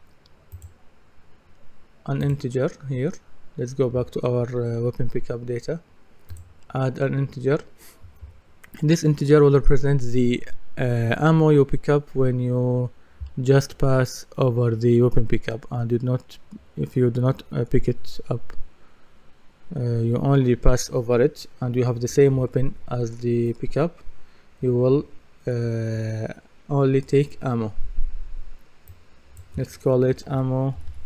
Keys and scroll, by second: 30.0-31.0 typing.